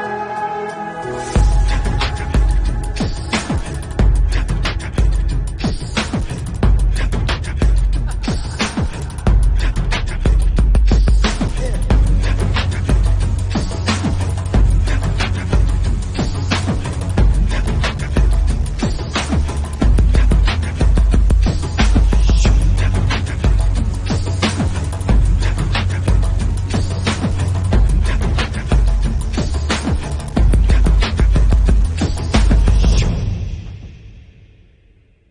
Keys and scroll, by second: 1.6 ], 4.0 Left, 5.7 Right, 6.6 ctrl+u, 9.6 ctrl+u, 14.5 Left, 14.5 BackSpace, 14.8 8, 14.9 Delete, 15.0 5, 15.1 Return, 17.3-18.3 typing, 18.4 Return, 20.4 ctrl+alt+z, 24.7 Left, 25.3 Right, 25.6 Left, 26.0 Left, 26.9 Left, 27.1 Right, 27.3 Left, 29.3 ctrl+u, 32.3 ctrl+d, 32.4 ctrl+s.